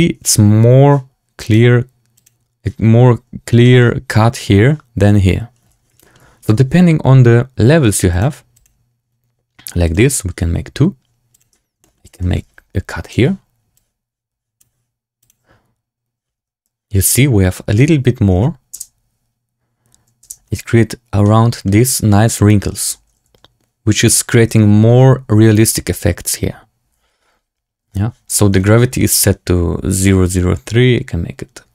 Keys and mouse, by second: 1.4 click, 2.2 click, 3.5 shift+drag, 5.9 shift+drag, 8.2 click, 11.7 shift+click, 12.1 shift+drag, 13.1-14.5 drag, 15.1 click, 16.3 Tab, 18.3 Tab, 18.7 space, 20.4 space, 21.1-21.6 drag, 22.7 space, 28.2 space, 28.9 shift+drag, 30.1-31.7 drag.